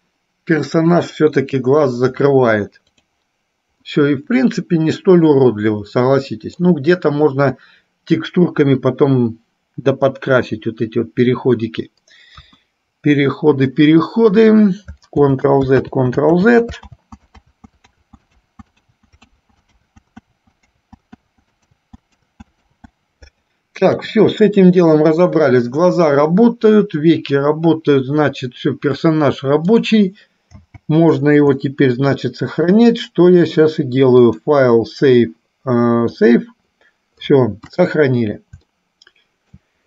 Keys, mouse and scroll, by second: 0.9 click, 3.1 click, 4.1-6.8 middle drag, 12.6 KP_1, 15.4 ctrl+z, 16.2 ctrl+z, 16.8 ctrl+z, 18.3 ctrl+z, 19.6 ctrl+z, 20.2 ctrl+z, 20.6 ctrl+z, 21.2 ctrl+z, 21.6 ctrl+z, 21.9 ctrl+z, 22.6 ctrl+z, 23.2 ctrl+z, 23.9 KP_1, 30.7 n, 31.8-32.9 shift+middle drag, 34.3-36.6 drag, 37.7 KP_1, 39.1 shift+middle click.